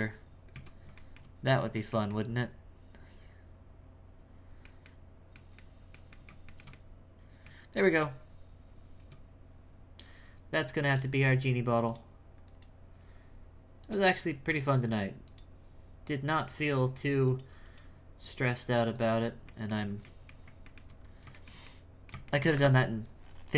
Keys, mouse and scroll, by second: 0.0-0.5 scroll down 4, 0.5 z, 0.9 shift+middle click, 1.4-1.7 scroll down 1, 1.7-7.7 middle drag, 7.7 right click, 8.0-9.0 scroll down 4, 9.0 x, 10.8-12.6 drag, 13.8 click, 19.4 middle click, 19.9 scroll up 2, 20.0 middle click, 21.0-21.3 scroll up 1, 21.3-23.5 shift+middle drag.